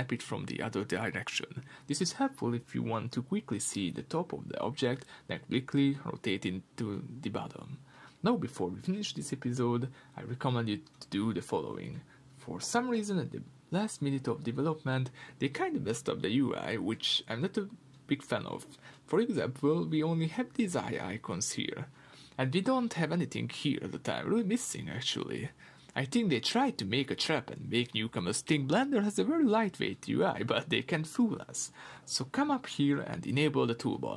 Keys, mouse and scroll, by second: 1.0 KP_3, 2.0 KP_7, 2.1-4.6 middle drag, 4.6 click, 12.1 click, 14.3-17.8 middle drag, 17.8 click, 18.1-18.9 middle drag, 18.9 scroll down 1, 25.9-33.9 middle drag, 33.9-34.1 drag.